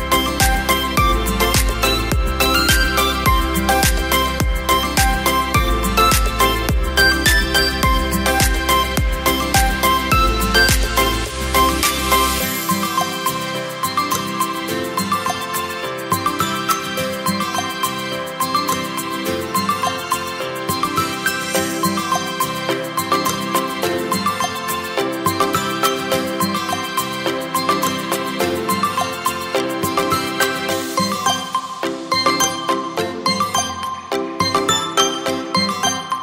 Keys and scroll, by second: 24.2 Return, 32.1 space, 35.7 Up, 35.9 Up.